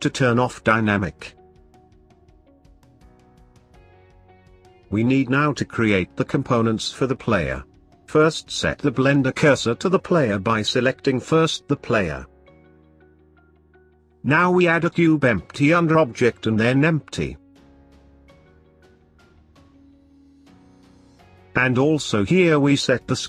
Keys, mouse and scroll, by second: 2.5-4.5 drag, 4.5 middle click, 5.1-5.5 scroll up 4, 5.5-8.0 middle drag, 8.0 click, 8.6 shift+s, 13.1 click, 16.2 click, 21.5 s.